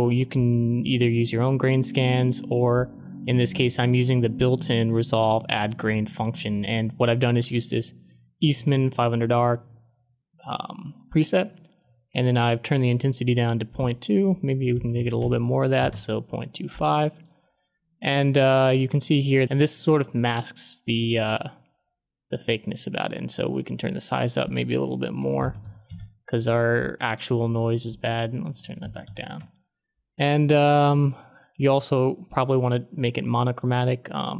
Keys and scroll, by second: 14.5-15.7 typing, 15.8 Return, 24.9-26.1 typing, 28.3-29.5 typing.